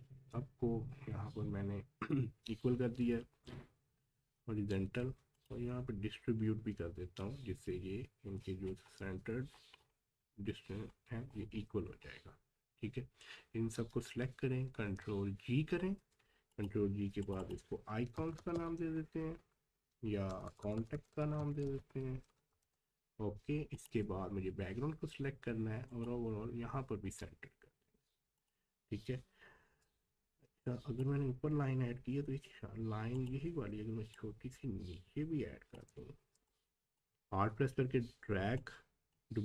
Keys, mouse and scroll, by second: 5.3 click, 8.4 scroll up 1, 9.0-9.4 scroll up 1, 9.4 scroll down 1, 10.2 scroll up 1, 11.3 scroll down 1, 14.9 ctrl+g, 16.5 click, 18.2 i, 21.2 c, 22.6 Return, 23.7 ctrl+click, 29.0 scroll down 1, 30.4 space, 30.6 click, 30.9 space, 31.2-31.7 scroll down 1, 33.1 click, 34.2-35.9 alt+drag, 35.9-36.3 scroll up 1, 36.3 space, 36.5 click, 36.8 space, 37.1 scroll up 1, 38.6-39.4 drag.